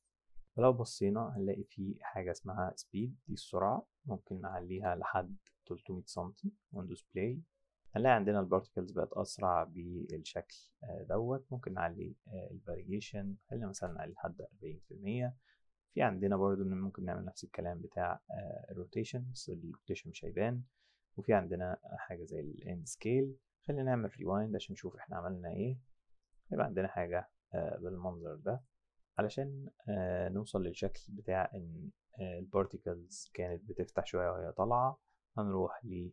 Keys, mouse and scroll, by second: 1.5 click, 2.9 click, 4.2 KP_3, 4.3 KP_0, 4.5 KP_0, 4.8 KP_Enter, 6.1 click, 6.7 click, 7.8 click, 11.6 click, 12.8 click, 13.7 KP_5, 13.7 KP_0, 14.0 KP_Enter, 16.2 click, 24.1 click, 24.6 click, 26.2 click, 28.6 click.